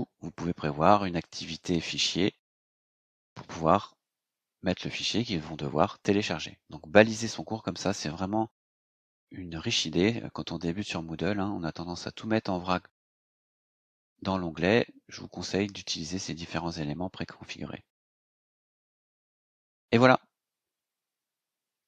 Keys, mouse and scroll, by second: 1.2 click, 18.4 click, 19.3 scroll up 2, 19.9 scroll up 2, 20.1 scroll down 2, 20.4 scroll up 2, 20.5-20.9 scroll down 2, 20.9 scroll up 2, 21.3 scroll down 2.